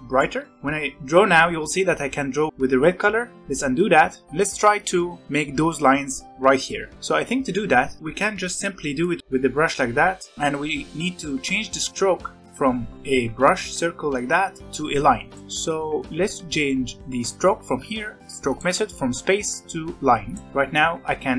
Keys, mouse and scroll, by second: 0.3 scroll up 1, 0.5-2.5 drag, 3.2 ctrl+z, 4.2-5.7 scroll down 3, 9.0 drag, 9.2 ctrl+z, 9.8 ctrl+z, 14.7-15.3 scroll down 3, 15.3-18.2 drag, 20.7-21.3 drag.